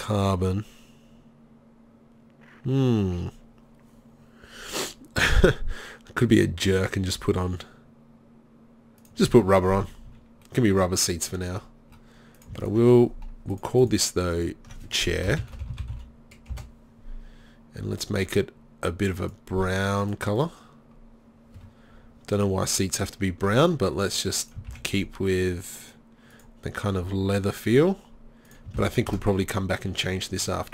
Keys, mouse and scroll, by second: 10.1 z.